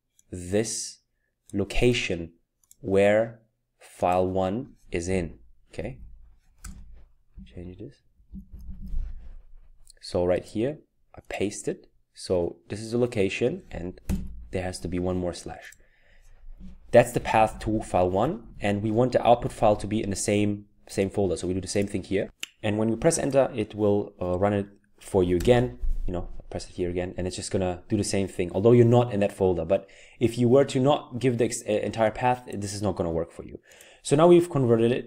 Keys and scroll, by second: 5.2 Left, 5.6 Left, 5.6-8.7 typing, 10.8 typing, 14.1 /, 17.0 Right, 17.1 Right, 17.2 Right, 17.3 Right, 17.5 Right, 17.6 Right, 17.7 Right, 18.4 Right, 19.4 Right, 25.4 Return.